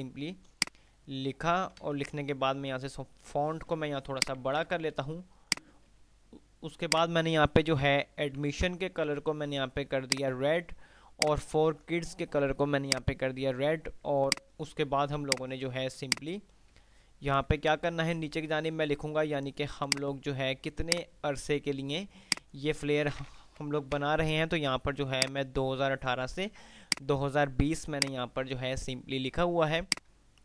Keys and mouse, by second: 0.8-1.6 shift+drag, 4.6 c, 5.6 click, 7.1 ctrl+click, 8.9 ctrl+q, 10.4 click, 11.4 ctrl+click, 16.8 F3, 19.9 click, 21.9 F2, 24.1 shift+Page_Up, 25.4-26.4 drag, 27.1 F2, 30.1 click.